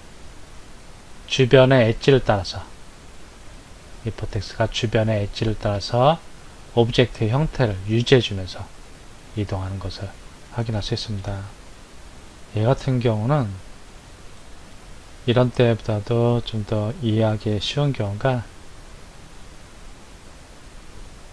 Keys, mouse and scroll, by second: 14.0 click, 16.0-17.1 scroll down 1.